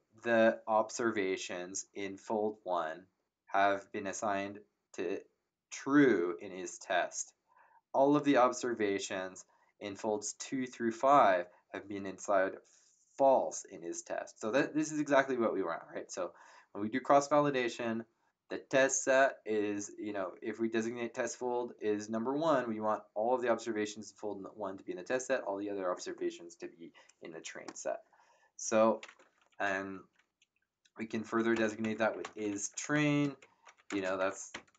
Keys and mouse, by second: 31.3-34.7 typing.